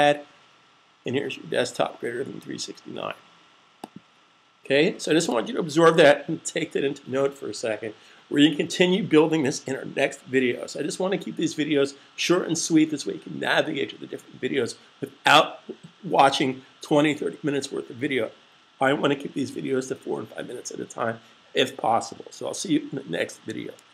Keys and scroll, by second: 5.7 super+s.